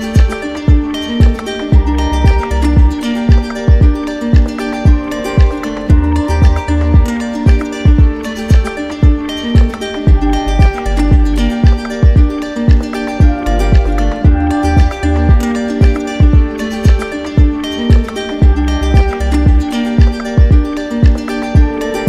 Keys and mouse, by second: 0.6 shift+click, 1.6 shift+click, 4.1 click, 6.5 click, 7.3 shift+click, 8.4 shift+click, 9.5 shift+click, 11.9 click, 12.6 click, 14.6 click, 17.7-18.8 drag, 19.0-20.1 drag.